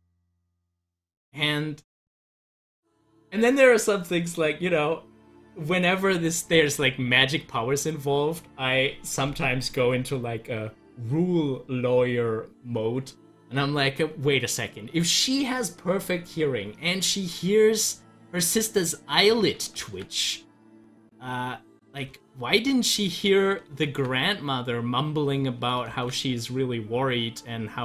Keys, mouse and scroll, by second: 2.0-17.9 middle drag, 17.9-19.7 drag, 19.8 ctrl+z, 22.1 ctrl+z, 25.9 ctrl+z.